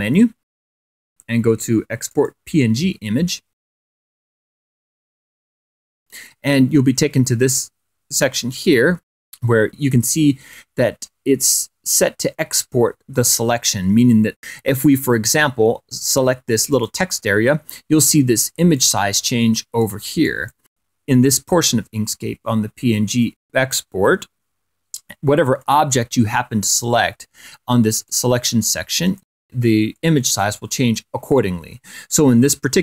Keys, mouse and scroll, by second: 3.3 click, 6.3 click, 10.3-10.6 scroll up 1, 19.4 click, 21.1 click, 22.2 click, 22.9 click, 26.4 click, 28.8 click, 29.9 click, 31.0 click.